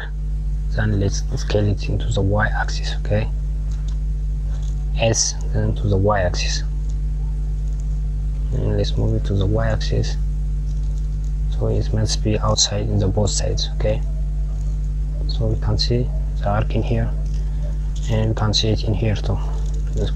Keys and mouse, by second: 0.2 click, 3.5 KP_Subtract, 3.9 KP_Subtract, 4.8 s, 19.5 KP_1.